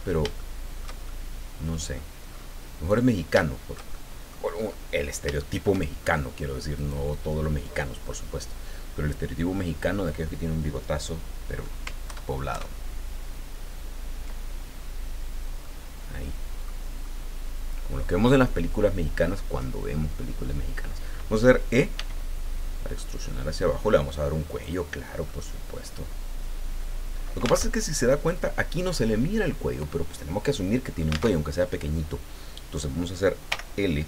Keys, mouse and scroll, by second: 0.4 shift+middle click, 1.2 shift+middle click, 2.3 scroll up 2, 2.4 middle click, 3.4-4.5 shift+middle drag, 4.6-5.0 scroll up 2, 5.4 shift+middle click, 6.0 shift+scroll up 3, 6.7 middle click, 7.8-8.4 scroll down 3, 12.0 ctrl+KP_Add, 15.6-16.8 middle drag, 17.0-18.3 middle drag, 18.5 middle click, 22.0 e, 24.5 click, 24.9 scroll down 2, 25.2-27.4 drag, 27.4 alt+middle click, 27.7 alt+Tab, 31.4 alt+Tab, 33.5 l.